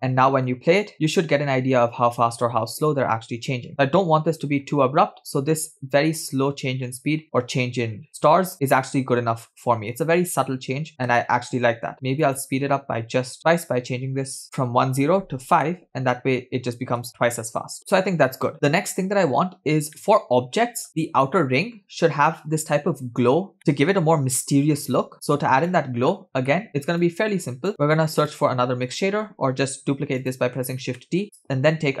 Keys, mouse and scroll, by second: 0.3 space, 11.6 space, 12.7-16.0 drag, 14.4 shift+Left, 17.8 space, 18.5 space, 19.6-20.0 scroll down 1, 20.2-20.9 middle drag, 23.6 middle click, 25.3-25.7 scroll down 2, 25.7 middle click, 26.5-26.9 scroll down 3, 27.2 click, 27.7-28.1 middle drag, 28.3 click, 29.3 shift+d, 31.0 middle click, 31.2 click.